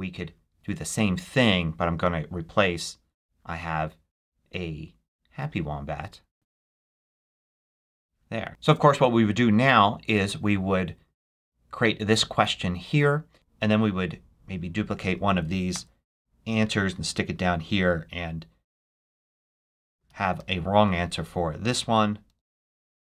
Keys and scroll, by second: 0.4 super+v, 15.6 super+d, 19.9 super+a, 20.2 super+c, 22.1 super+v.